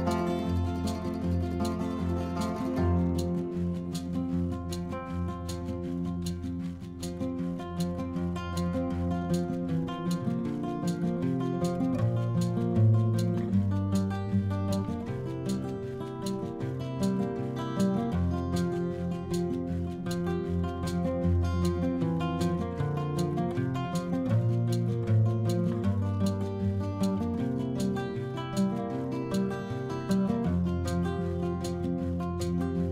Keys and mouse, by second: 1.9 shift+middle click, 5.5 click, 6.3 shift+middle click, 7.5 click, 8.5 click, 10.1 click, 10.9 click, 12.0 click, 12.4 middle click, 13.2 middle click, 13.6 click, 14.6 middle click, 15.2 click, 16.0 click, 17.3 middle click, 19.7 click, 21.0 click, 21.6 click, 21.6 click, 22.2-22.7 typing, 24.0 click, 24.9 Left, 25.0 Left, 25.1 a, 25.3 Right, 25.4 Right, 25.6 Delete, 25.8 Return, 27.4 click, 27.9 click, 28.3 click, 28.8 click, 29.6 click.